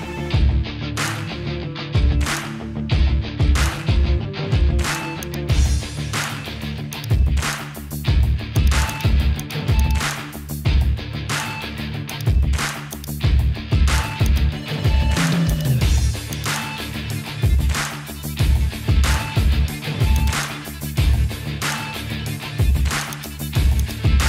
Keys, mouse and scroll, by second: 1.7-2.8 middle drag, 3.5 middle click, 4.4 middle click, 5.2 click, 6.0 Tab, 7.0 click, 8.6 click, 11.8 ctrl+z, 12.1 click, 12.9-14.3 drag, 15.5 click, 16.4-20.3 drag, 23.1 click.